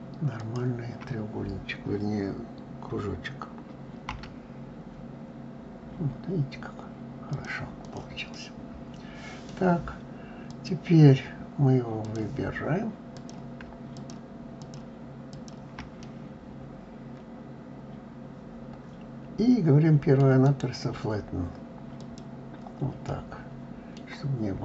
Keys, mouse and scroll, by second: 0.0 shift+click, 7.4 click, 7.9-10.1 middle drag, 10.1 click, 11.6 click, 12.7 click, 13.6 shift+click, 14.2 shift+click, 14.9 shift+click, 15.6-18.6 middle drag, 20.1-22.7 right drag, 22.7-24.6 middle drag.